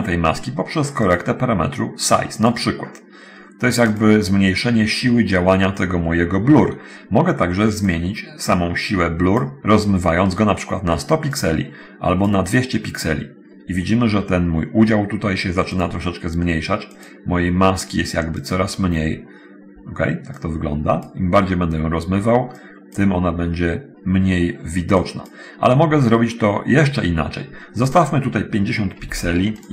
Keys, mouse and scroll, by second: 1.1 click, 8.1-9.8 drag, 11.6 click, 16.0 click, 17.2 click, 18.6 click, 20.6 click, 22.8 click, 25.1 click, 28.1 click, 29.2 5, 29.3 0, 29.6 click.